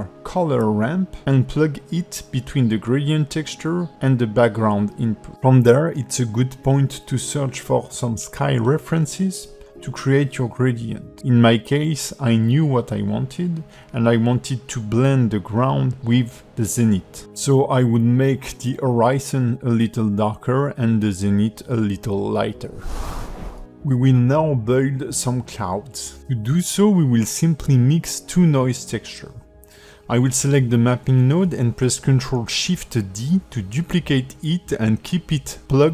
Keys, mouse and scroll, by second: 0.7 shift+a, 6.6 click, 14.3 click, 15.6 click, 18.0 shift+middle click, 18.0 scroll up 8, 18.5 shift+middle click, 19.2 click, 19.5 KP_Decimal, 19.9 scroll up 7, 20.2 middle click, 20.4 shift+middle click, 25.4 click, 26.0 shift+click, 26.5 shift+middle click, 30.1 g, 31.3 click, 31.9 ctrl+shift+d, 34.2 click.